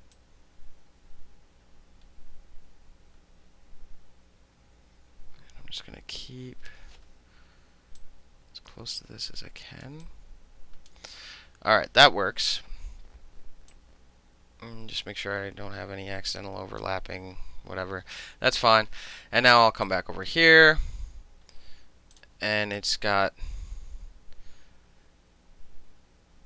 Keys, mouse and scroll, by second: 0.2-6.8 drag, 8.1-9.9 drag, 10.1 click, 12.8 middle click, 13.8-16.9 drag, 16.9-19.9 middle drag, 19.9 click, 20.0-22.8 middle drag, 22.2 click, 22.8 click.